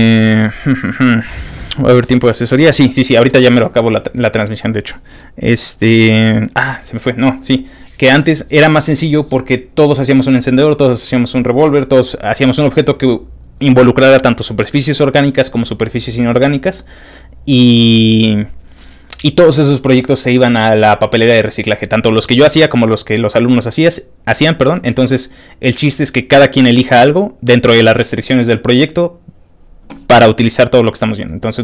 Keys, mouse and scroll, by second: 30.3 click.